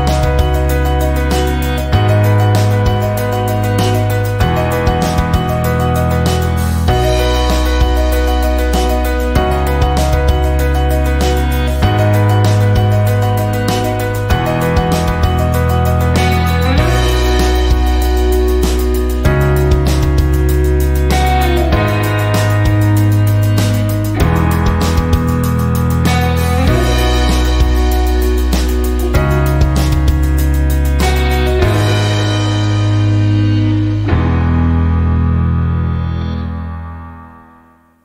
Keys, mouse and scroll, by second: 4.1 click, 4.9 click, 6.8-9.0 typing, 10.3 click, 10.9 click, 11.7-13.8 typing, 14.8 click, 15.2 click, 16.1-18.6 typing, 29.8 click, 30.9 click, 34.1 click, 36.2 click, 37.4-38.0 typing.